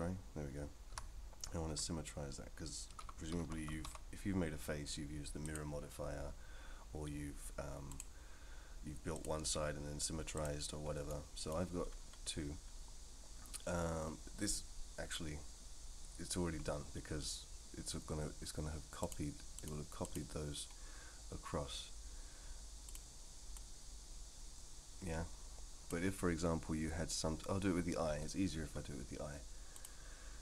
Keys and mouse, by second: 0.9 a, 1.7 F3, 3.4 m, 7.9 click, 9.1-10.4 drag, 11.1 middle click, 19.1-20.1 drag, 22.9 click, 23.5-25.9 drag, 29.7 click.